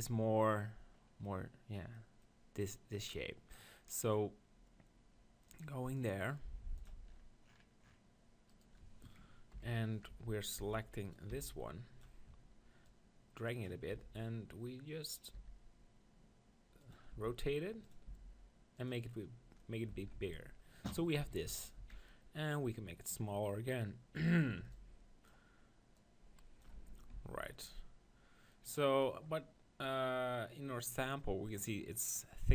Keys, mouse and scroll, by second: 5.5-6.7 right drag, 6.7-8.7 drag, 8.5-10.3 right drag, 9.2 ctrl+KP_1, 10.1 Tab, 10.6 z, 11.0-13.1 right drag, 11.3 b, 12.9-14.7 drag, 14.0 r, 15.2-16.8 drag, 15.3 s, 17.1 r, 18.0 s, 19.9 click, 20.0 Tab, 20.1 z, 20.9 middle click, 21.2 KP_1, 21.5 Tab, 21.8 z, 22.5-24.3 drag, 24.7 b, 26.0-27.5 drag, 26.8 Tab, 27.1 z, 27.5-31.7 middle drag.